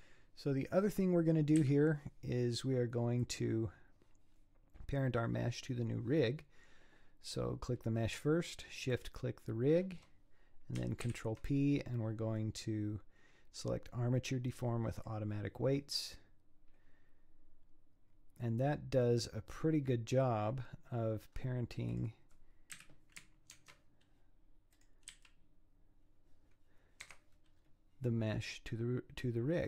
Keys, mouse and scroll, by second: 0.6 scroll down 2, 1.6 KP_1, 3.2 click, 8.9 shift+click, 11.1 ctrl+p, 19.0-21.3 middle drag, 21.3-21.9 scroll up 4, 21.9 click, 22.7 KP_1, 23.7 ctrl+Tab, 24.8 click, 25.1 g, 27.5 scroll down 5.